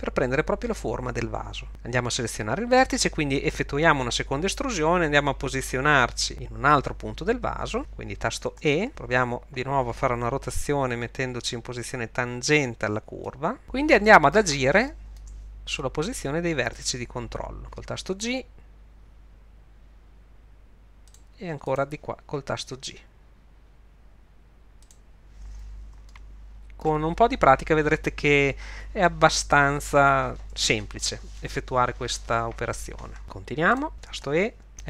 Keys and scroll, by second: 8.6 e, 10.5 r, 18.2 g, 22.5 g, 34.3 e.